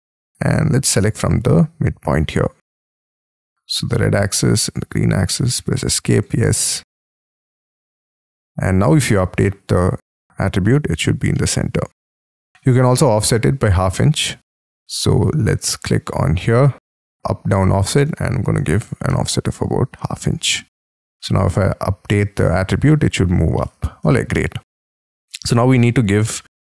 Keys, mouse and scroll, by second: 0.0 middle click, 0.4-4.8 scroll up 5, 5.5-6.5 scroll up 1, 6.5 Escape, 7.1 middle click, 7.7 middle click, 7.9-8.9 scroll down 9, 8.2 Escape, 10.8-11.4 scroll up 10, 11.4 middle click, 18.2-19.1 typing, 23.6 middle click, 24.8-25.3 scroll down 8, 25.3 middle click, 25.9-26.4 scroll up 9, 26.4 middle click.